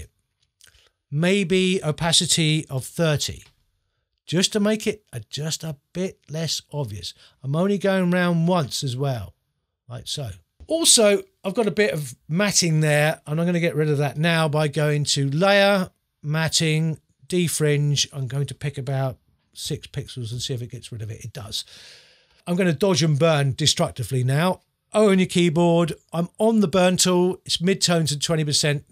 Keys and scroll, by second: 2.8 3, 19.6 6, 25.1 o.